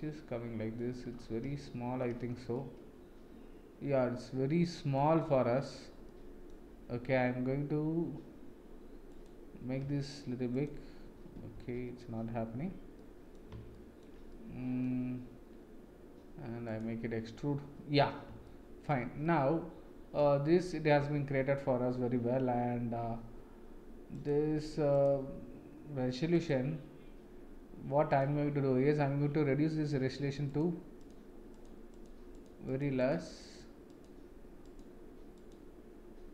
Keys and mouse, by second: 1.6-2.0 shift+middle drag, 2.5-4.9 middle drag, 6.0-6.4 middle drag, 9.1 click, 9.8 s, 11.5 ctrl+z, 12.9-13.3 middle drag, 13.7-14.1 shift+middle drag, 14.3-14.8 middle drag, 18.4 shift+middle click, 19.2 middle click, 24.1 click, 26.3-28.2 drag, 30.5 click, 31.9 click, 32.3 click, 32.7 click, 33.0 click, 33.3 click, 34.6 click, 35.3 click.